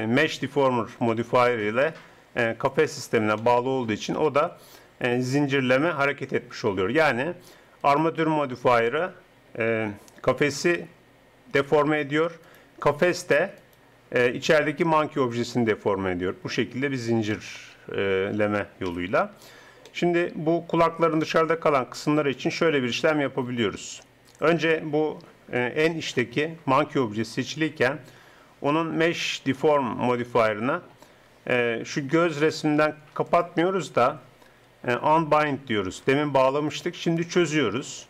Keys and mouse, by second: 1.5-3.3 drag, 5.4-6.6 middle drag, 7.8-9.3 right drag, 9.3 click, 9.5 right click, 10.3 r, 12.9 right click, 13.7-17.3 drag, 17.3-18.4 middle drag, 18.4 click, 18.9 KP_1, 25.0-32.4 middle drag, 32.4-35.0 drag.